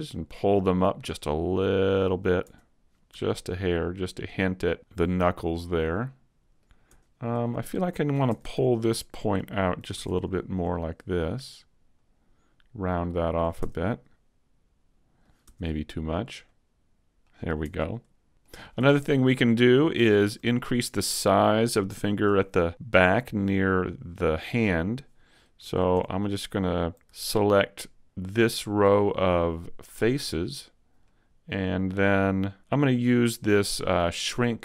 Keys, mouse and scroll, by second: 1.0 click, 2.4 Tab, 2.7 scroll down 1, 3.1 a, 3.4 middle click, 5.2 middle click, 6.9 Tab, 7.4 shift+middle click, 8.2 ctrl+Tab, 9.9 ctrl+Tab, 10.6 right click, 11.4 click, 13.6 Tab, 13.9 middle click, 15.4 Tab, 16.4 click, 17.6 Tab, 17.9 middle click, 18.7 shift+middle click, 18.8 Tab, 19.2 middle click, 19.8 scroll up 1, 20.1 shift+middle click, 21.3 middle click, 23.0-23.4 scroll down 1, 25.6 ctrl+Tab, 28.2 alt+right click, 31.0 middle click.